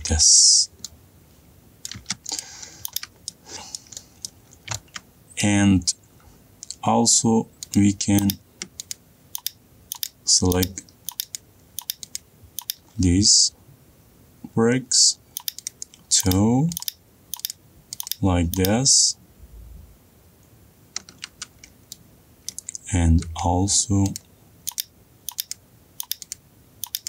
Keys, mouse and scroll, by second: 0.2-2.4 scroll, 2.4 middle click, 3.0 click, 3.3 scroll, 3.3 scroll down 4, 3.5 middle click, 3.6 middle click, 3.6-4.3 scroll up 2, 4.8 middle click, 5.1 middle click, 5.1 scroll up 3, 6.0-6.6 scroll down 3, 8.3 click, 9.5 ctrl+click, 23.1 middle click, 24.8 middle click.